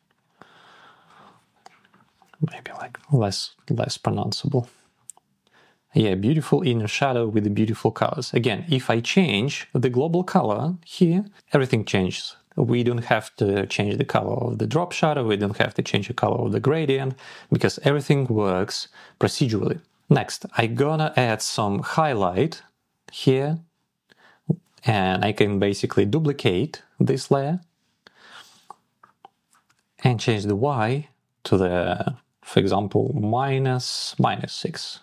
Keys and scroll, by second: 0.1 Up, 0.5 Down, 2.4 Down, 3.6 Up, 30.8 Down, 33.0 Up, 33.9 Down.